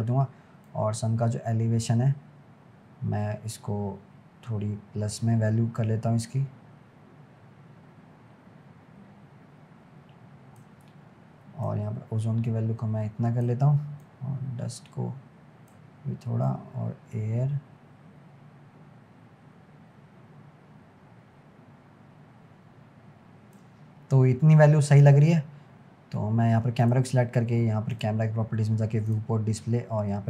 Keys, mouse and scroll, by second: 11.7-19.5 drag, 24.1-24.4 scroll down 6, 25.0 click, 25.8-26.8 scroll up 5, 26.8 click, 28.0 click, 28.6-29.1 scroll down 1, 29.1-30.2 drag.